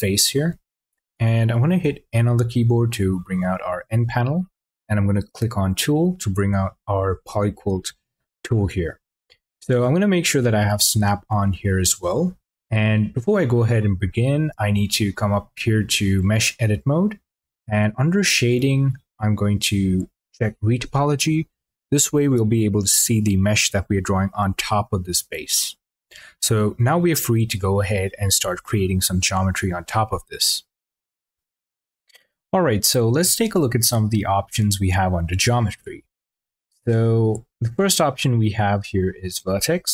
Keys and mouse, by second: 1.6 n, 16.5-24.1 drag, 39.0 click.